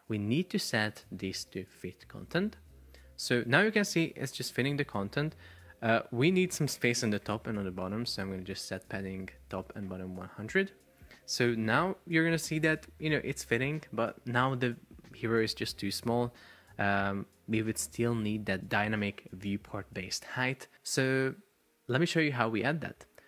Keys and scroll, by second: 9.7 Return, 11.9 super+p, 21.7 Escape.